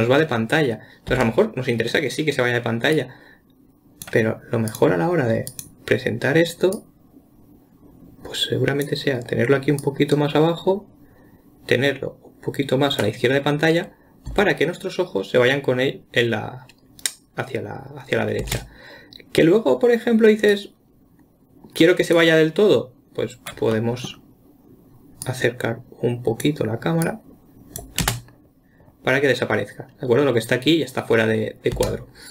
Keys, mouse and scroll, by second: 1.5 space, 3.4-5.2 drag, 5.9 click, 7.2 click, 10.2 click, 14.7 space, 18.9 space, 20.9-23.9 drag, 24.2-25.7 middle drag, 25.7 click, 27.4 click, 28.4 space, 32.2 space.